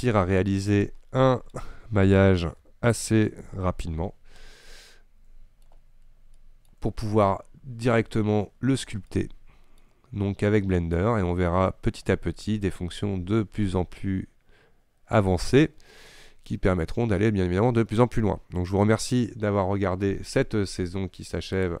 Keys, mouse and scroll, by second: 2.6 n, 4.0 t, 4.9-6.0 middle drag, 6.0-6.4 scroll up 2, 6.4 shift+middle click, 6.9 scroll down 2, 7.1 scroll up 1, 7.3-21.8 shift+middle drag.